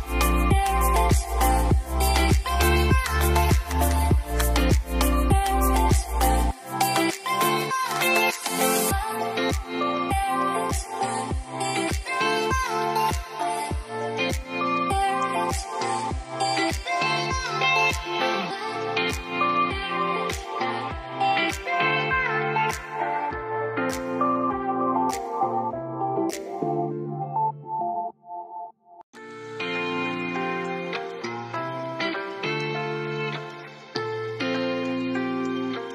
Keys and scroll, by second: 0.6-1.7 typing, 9.6-10.7 typing, 15.4-16.9 typing, 34.7 0.